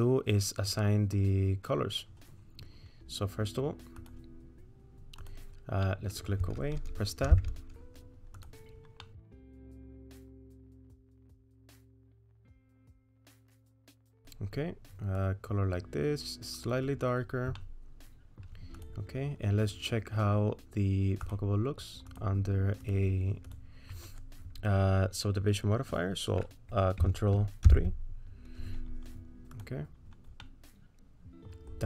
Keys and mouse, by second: 4.0 click, 5.9 middle click, 7.6 Tab, 8.4 click, 9.0 middle click, 10.6 middle click, 11.0 click, 11.5 click, 17.6 middle click, 18.8 click, 22.2 click, 27.9 ctrl+3, 30.5-31.6 middle drag.